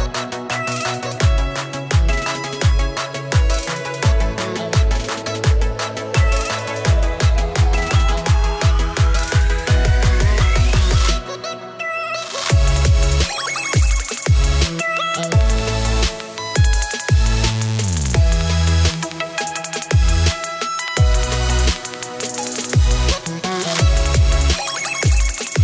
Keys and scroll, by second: 2.1 space, 3.6 space, 4.4 -, 5.2 +, 5.3 space, 11.4-12.6 typing, 14.7 space, 15.8 space, 16.5 space, 17.0 space, 18.1 space, 21.8 z, 22.1 space, 23.5 -.